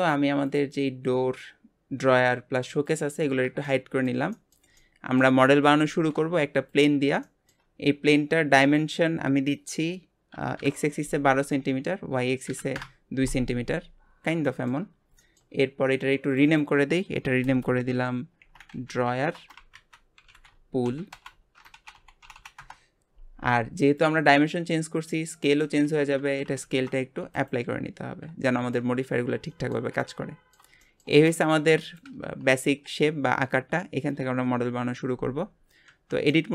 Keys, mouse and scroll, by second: 0.0 click, 0.4 click, 2.8 click, 3.6-5.4 shift+middle drag, 5.4 scroll up 2, 5.8 shift+a, 7.2-8.7 shift+middle drag, 8.7-11.8 drag, 13.8-14.4 scroll up 6, 14.4 shift+middle click, 14.8 scroll up 1, 15.2-16.3 shift+middle drag, 16.3-19.6 drag, 22.3 l, 26.6 ctrl+a, 27.9-28.4 scroll up 2, 28.4-29.0 shift+middle drag, 29.0-29.5 scroll up 3, 29.5-34.0 shift+middle drag, 36.0 Tab, 36.3-36.5 middle drag.